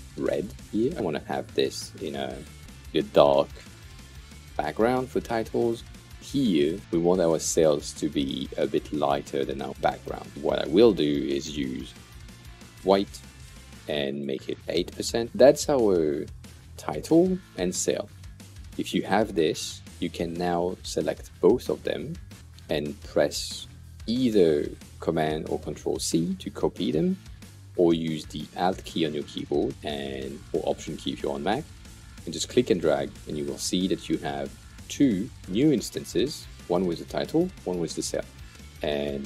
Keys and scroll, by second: 1.5-2.3 typing, 2.6 Return, 11.7 f, 12.7 Return, 14.6 8, 14.7 Return.